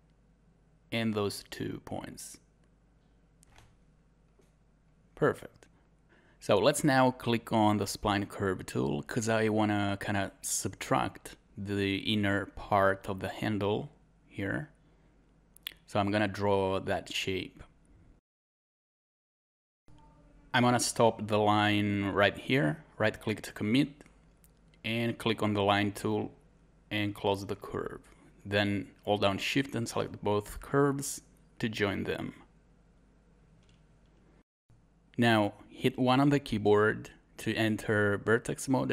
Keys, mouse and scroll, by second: 0.7 click, 1.4 scroll up 1, 5.3 scroll down 1, 8.0 scroll up 1, 28.1 scroll down 1, 34.1 scroll up 1.